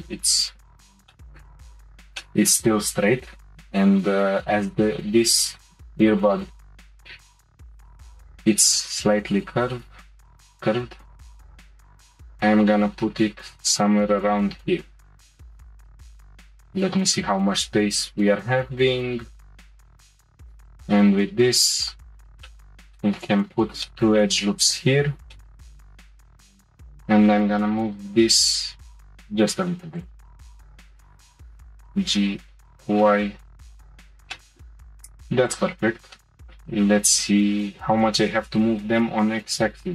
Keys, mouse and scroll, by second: 0.3 click, 1.1 shift+middle click, 1.6-2.0 scroll up 3, 2.2-5.2 shift+middle drag, 7.6 g, 15.4 click, 15.7 click, 16.0-18.2 middle drag, 20.4 ctrl+r, 22.5-26.0 shift+middle drag, 29.9 click, 31.0 shift+middle click, 31.4 g, 34.3-35.5 shift+middle drag, 35.5 click, 36.2 shift+middle click, 36.7-37.6 scroll up 1, 37.6 g.